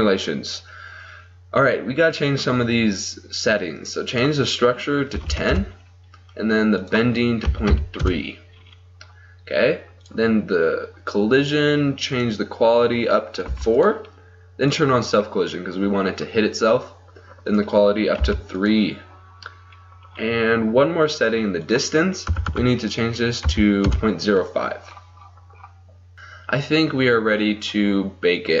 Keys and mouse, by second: 4.1-14.0 drag, 14.9-22.5 drag, 22.5 BackSpace.